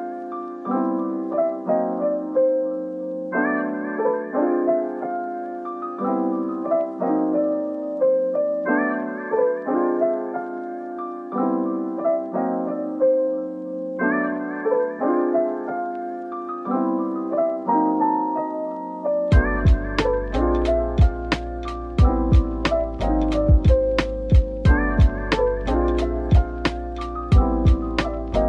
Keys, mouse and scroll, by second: 0.6-1.6 typing, 0.9 Tab, 1.7 middle click, 4.8 Tab, 5.9 typing, 8.2-9.1 typing, 10.2 typing, 17.6 middle click, 18.1 scroll down 1, 18.9 middle click, 19.7-20.5 scroll up 1, 20.5 middle click, 22.2 double click, 25.3-26.4 scroll up 1, 26.4 middle click, 27.3 typing.